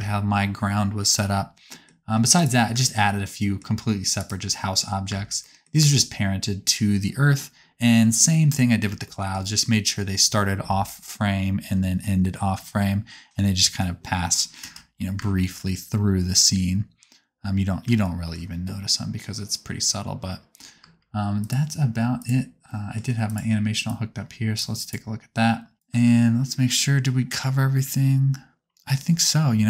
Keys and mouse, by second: 0.2-2.4 drag, 2.4-3.6 shift+middle drag, 3.7 g, 5.1 space, 5.9 space, 14.6 KP_0, 15.2 space, 20.8 space, 21.4-23.4 drag, 23.9-24.9 drag, 25.7-29.3 drag, 25.9 space.